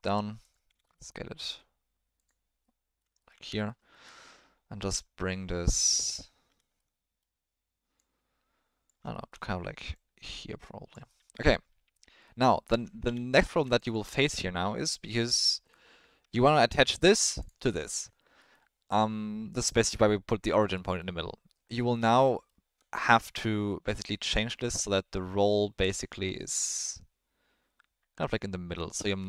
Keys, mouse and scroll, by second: 0.6 s, 2.7-3.0 middle drag, 3.2 ctrl+middle click, 4.7 g, 6.8 middle click, 8.0 click, 9.2 ctrl+middle click, 10.0-11.0 drag, 11.1-12.3 middle drag, 12.6 middle click, 12.8 Tab, 13.0 3, 13.7 alt+shift+click, 13.8 alt+shift+click, 14.1-15.7 drag, 16.2 Tab, 16.7 click, 17.4 click, 17.7 middle drag, 18.4 middle click, 20.7 middle drag, 21.7 middle drag, 22.1 alt+middle drag, 22.3 alt+middle drag, 23.0-23.4 middle drag, 24.0-29.1 drag.